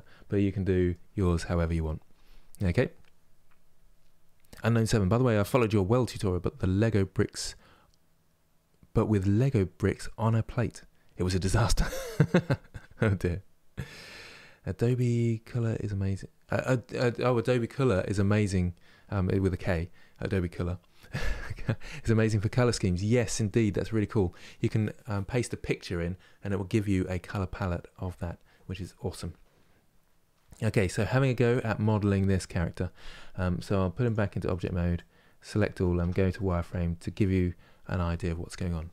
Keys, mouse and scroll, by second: 33.7 click, 34.1-35.2 middle drag, 35.2 click, 35.6 Tab, 36.0 middle click, 36.4-36.8 scroll down 2.